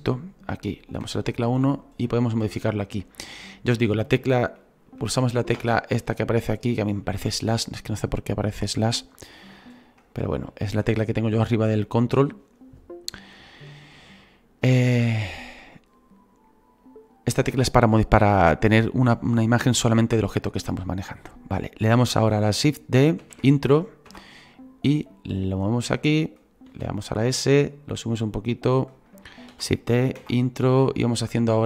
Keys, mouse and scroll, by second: 1.0 KP_1, 1.6 scroll up 2, 2.2-3.2 shift+middle drag, 3.2-3.6 scroll down 3, 5.5 /, 23.3 shift+d, 25.3-26.7 drag, 26.7 s, 27.9-29.5 drag, 29.5 shift+d, 30.7-31.6 drag.